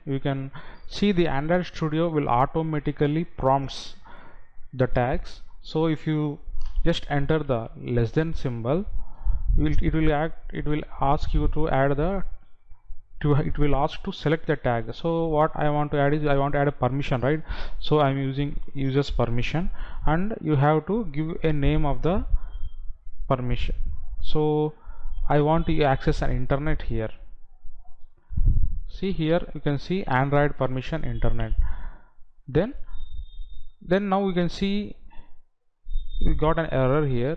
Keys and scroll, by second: 12.1 Down, 15.0 Up, 29.6 Down, 32.8 Right, 34.1 Left.